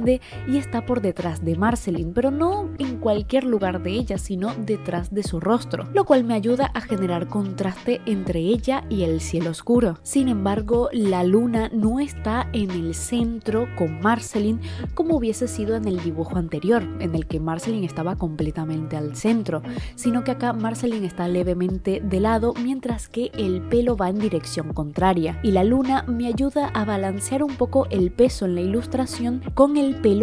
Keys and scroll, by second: 16.7 i.